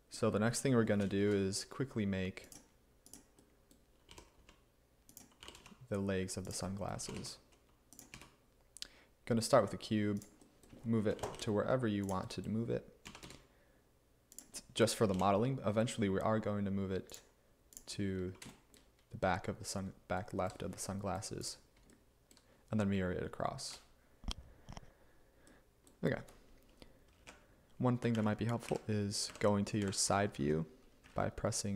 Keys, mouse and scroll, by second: 1.3 a, 4.1 g, 4.5 x, 5.5 g, 5.6 z, 7.1 g, 11.2 g, 11.4 y, 13.1 s, 15.2 g, 27.3-31.7 typing.